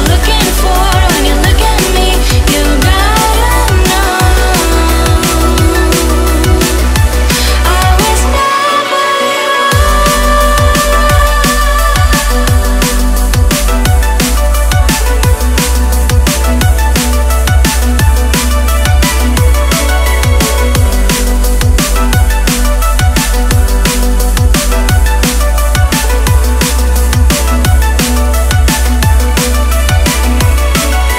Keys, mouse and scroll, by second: 0.3 r, 1.1 g, 3.2 click, 4.6 s, 6.7 click, 7.6 g, 9.2 r, 10.1 g, 11.5 r, 12.7 g, 15.1 click, 16.6 click, 17.7 click, 18.8 click, 20.4 click, 22.5 click, 23.2 click, 23.9 r, 26.7 g.